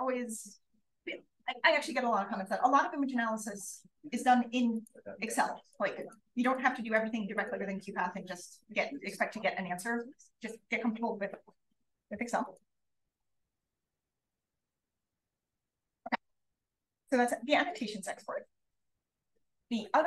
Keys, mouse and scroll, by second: 18.6-19.6 drag.